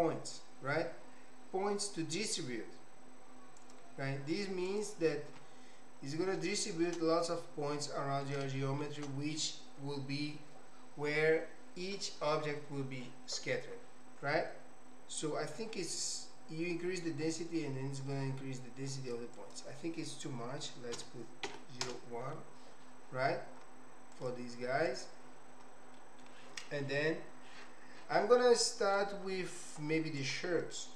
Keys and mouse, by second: 6.6 shift+click, 7.9 click, 8.5 shift+click, 15.8-19.2 drag, 19.3-22.6 drag, 25.9 middle click, 28.6 middle click, 30.3 click.